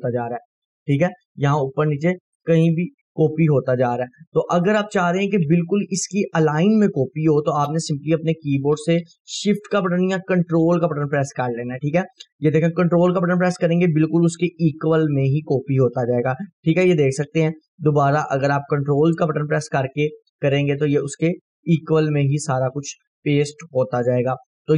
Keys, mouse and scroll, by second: 1.2 click, 2.4 right click, 4.1 Delete, 4.8 click, 4.9 Delete, 5.3 click, 5.6 Delete, 5.9-15.5 drag, 8.6-10.2 drag, 15.5 ctrl+right click, 17.2-20.0 click, 19.4 ctrl+right click, 20.7-22.8 ctrl+click, 22.6 ctrl+right click, 23.1 scroll down 1, 24.1-24.7 drag.